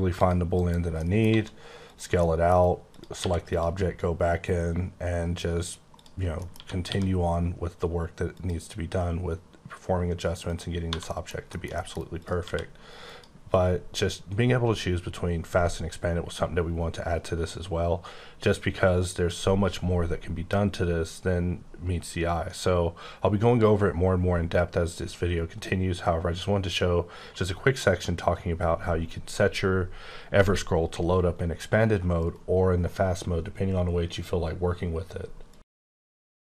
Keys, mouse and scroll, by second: 0.1 click, 0.5 KP_Decimal, 1.0 middle click, 1.3 s, 1.8 click, 2.2 middle click, 2.4 scroll down 5, 2.9 click, 3.1 q, 3.5 click, 3.8-4.3 scroll down 4, 4.3-5.6 scroll up 5, 5.6-5.9 scroll down 1, 5.9 click, 6.2 scroll down 1, 6.3 scroll up 1, 6.4 middle click, 6.5-6.8 typing, 8.3 click, 10.4 click, 10.7 scroll down 1, 10.8 1, 11.0 middle click, 12.1 click, 12.4 q, 13.0 click, 13.5-15.4 scroll down 18, 15.9-17.3 scroll down 7, 17.4-18.0 scroll down 6, 18.4 scroll down 3, 19.2 scroll up 4, 20.4-22.2 scroll up 8, 22.2-23.3 scroll up 8, 23.8-25.0 scroll up 10, 25.6-26.8 scroll up 9, 26.8-27.1 scroll down 7, 32.2 right click.